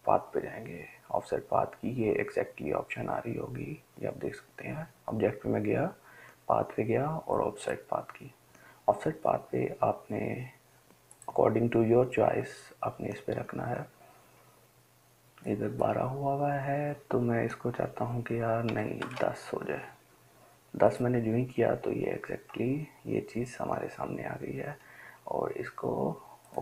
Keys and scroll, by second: 18.9-19.3 typing.